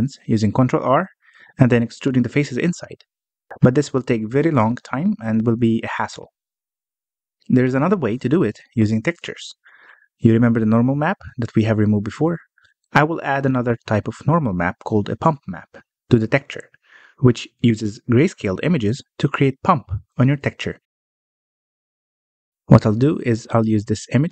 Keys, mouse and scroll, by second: 0.4 ctrl+r, 4.8 Tab, 5.2 alt+a, 5.5-9.2 middle drag, 9.3-10.5 scroll down 14, 9.9 middle click, 10.5 middle click, 11.0-12.4 scroll up 10, 12.4-22.5 middle drag, 22.7-24.3 middle drag.